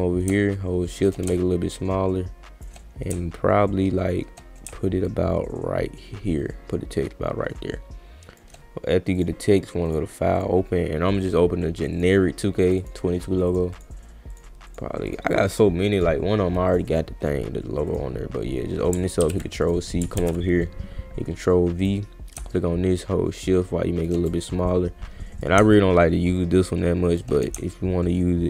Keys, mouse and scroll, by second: 0.6 shift+click, 1.3-2.6 shift+drag, 5.1-8.4 shift+drag, 9.2 click, 9.9 click, 10.3 click, 11.7 click, 11.9 click, 12.6 click, 12.8 click, 13.5 click, 13.7 click, 14.3 click, 14.7 click, 15.1 click, 15.9 click, 16.7 click, 17.9 click, 19.2 ctrl+c, 19.6 click, 20.2 ctrl+v, 21.8 click, 22.5-24.0 shift+drag, 24.3-25.4 drag, 26.6 shift+click.